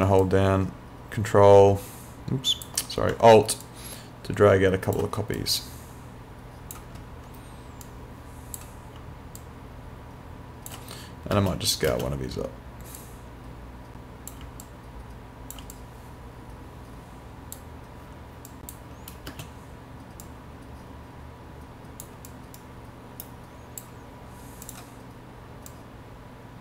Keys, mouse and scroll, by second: 0.2 ctrl+click, 3.6 alt+click, 5.4 click, 8.6 click, 9.4 alt+click, 11.4 space, 13.0 click, 14.6 alt+click, 15.8 click, 18.5 click, 19.3 space, 20.2 click, 22.6 right click, 23.3 click.